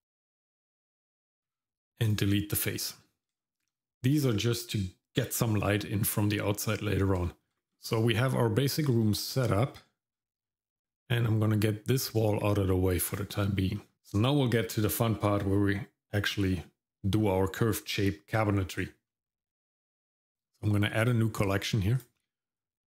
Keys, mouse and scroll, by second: 1.5 x, 3.0 scroll down 1, 3.4 shift+middle click, 7.2 shift+middle click, 7.5 shift+middle click, 7.5 scroll down 2, 7.9 middle click, 9.0 shift+middle click, 9.6 middle click, 10.1 scroll down 1, 10.4 middle click, 13.1 click, 13.8 middle click, 13.9 scroll up 1, 21.0 click, 21.4 click, 21.4 right click.